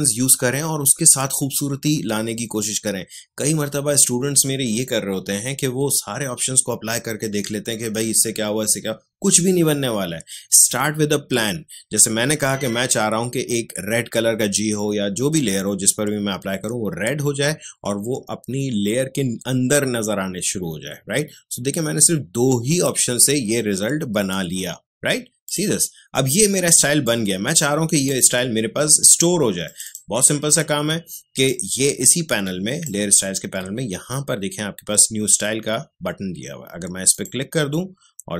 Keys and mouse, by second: 25.4 click, 26.8 space, 27.0 click, 27.2 space, 29.6-37.1 drag.